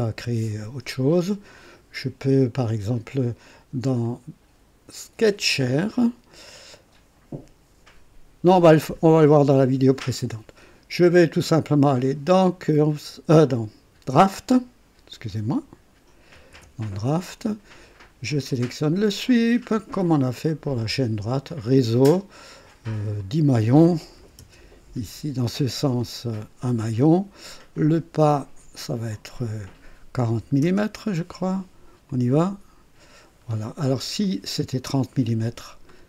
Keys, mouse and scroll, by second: 0.0-1.6 drag, 5.5 click, 12.8 click, 16.1-17.0 typing, 18.5 click, 20.4 click, 21.7 click, 23.2 click, 24.2-24.5 typing, 25.3 scroll down 1, 29.0 click, 30.4 typing, 32.1 click, 33.3-34.0 scroll down 1, 34.2-35.1 right drag, 35.4 typing, 35.5 scroll down 1, 35.9-36.0 right drag.